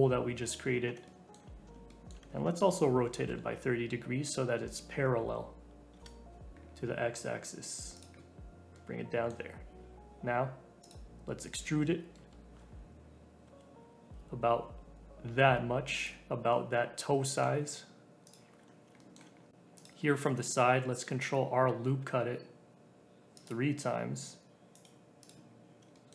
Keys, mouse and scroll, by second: 0.4 click, 0.7-1.0 scroll up 3, 1.0-2.9 shift+middle drag, 2.9 r, 6.6-7.3 scroll up 2, 7.3 s, 8.1-10.8 middle drag, 10.8 click, 11.5 e, 16.5-18.2 middle drag, 18.2 click, 18.6-19.7 scroll up 2, 19.0 shift+middle click, 19.7 click, 20.0-20.9 scroll up 1, 20.9 ctrl+r, 25.2 click, 25.5-25.9 scroll up 1, 25.9 shift+middle click.